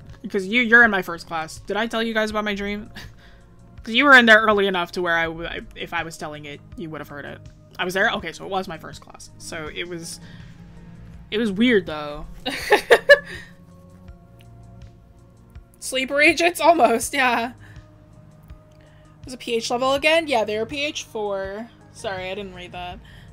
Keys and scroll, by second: 8.0 scroll up 1.